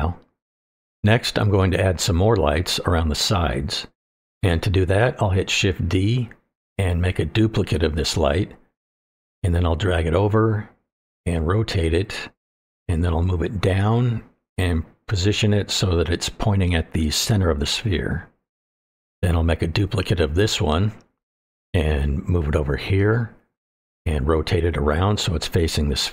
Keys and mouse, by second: 4.7 click, 4.7 right click, 4.9 middle click, 6.9 shift+d, 8.6 click, 9.2 click, 10.7 click, 11.0 middle click, 12.0-14.3 ctrl+drag, 15.1 click, 15.3 middle click, 15.9 click, 17.0-18.2 middle drag, 18.5-19.2 middle drag, 19.7 shift+d, 20.9-21.4 middle drag, 22.2-23.2 drag, 23.4 shift+middle click, 24.4 click, 25.0-26.1 drag.